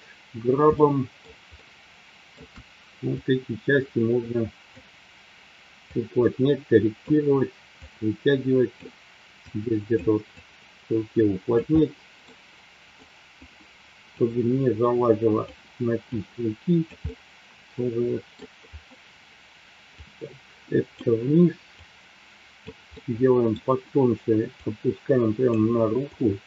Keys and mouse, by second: 0.8-2.4 shift+middle drag, 3.2-4.6 drag, 5.8-6.9 drag, 8.1 click, 9.4 click, 10.3-11.5 drag, 11.7 middle click, 12.9 click, 14.2-15.4 drag, 16.2 click, 17.0-18.4 middle drag, 19.9 click, 21.8 click, 22.8 middle click, 24.6 click, 26.0 click.